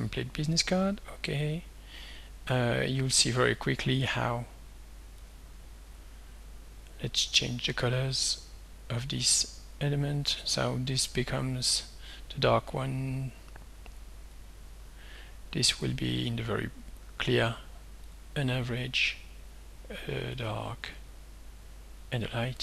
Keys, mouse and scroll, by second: 0.6 click, 1.3 click, 2.9-5.3 right drag, 5.3 click, 7.4 click, 8.7 click, 11.1 click, 13.2 click, 13.9 click, 14.4 click, 15.9 click, 16.9 click, 18.1 click, 18.9 click, 20.4 click, 21.4 click.